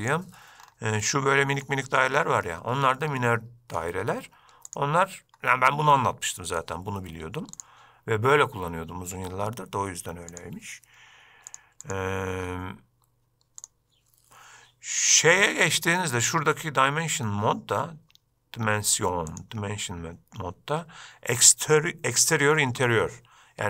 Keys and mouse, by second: 0.2 click, 1.2-1.8 middle drag, 3.3-4.0 middle drag, 6.1-6.8 middle drag, 10.5-11.7 drag, 12.1-13.8 drag, 19.5-23.6 drag.